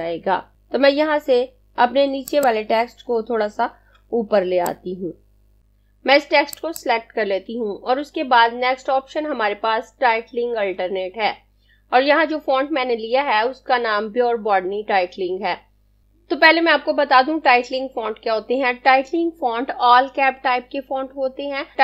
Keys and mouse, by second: 2.3 click, 4.3 space, 5.6 click.